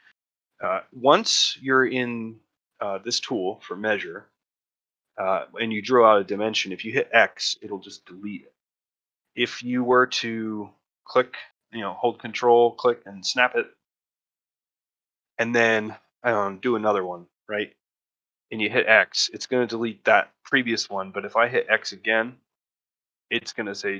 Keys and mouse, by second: 6.9 x, 9.0 middle drag, 9.3-9.7 ctrl+middle drag, 10.4-13.4 ctrl+drag, 16.4-16.8 drag, 17.7 middle drag, 20.8 middle drag, 21.1-21.4 middle drag.